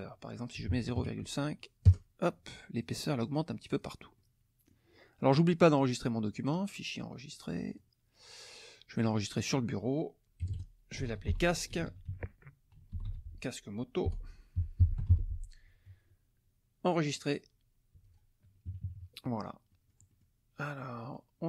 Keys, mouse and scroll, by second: 0.5 KP_0, 0.7 KP_Decimal, 1.0 KP_5, 1.8 KP_Enter, 2.8 click, 3.6 click, 4.1 click, 6.4 click, 7.7 click, 8.9 click, 10.4-15.6 typing, 16.8 click, 18.0 click, 18.7 KP_Subtract, 19.7 middle click, 19.7-20.4 scroll up 1, 20.6 click.